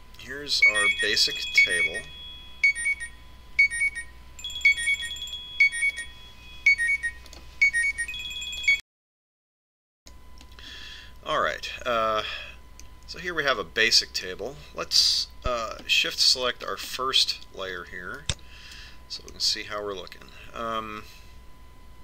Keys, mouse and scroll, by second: 0.0 Tab, 1.5-2.8 middle drag, 12.8-14.7 middle drag, 18.2 click, 19.9-21.3 middle drag.